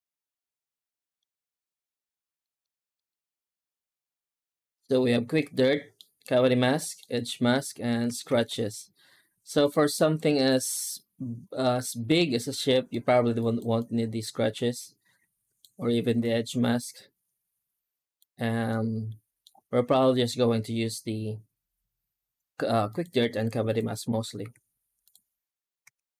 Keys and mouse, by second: 0.3-1.1 middle drag, 2.3 middle click, 2.9 middle click, 3.7 z, 5.3 middle click, 6.6 middle click, 8.2 ctrl+s, 10.3 right click, 10.8-12.7 middle drag, 13.2 right click, 13.6-15.5 drag, 16.1-18.1 drag, 18.5 middle click, 22.7 click, 23.5 click, 24.3 z.